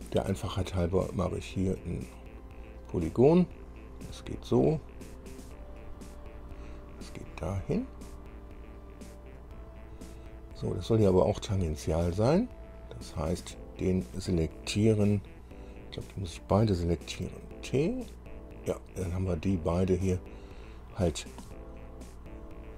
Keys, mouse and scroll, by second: 1.8 click, 4.3 click, 6.1 click, 9.6 click, 10.2 right click, 11.2 right click, 12.4 click, 15.9 click, 17.4 t, 20.0-20.7 scroll up 4, 22.2-22.7 drag.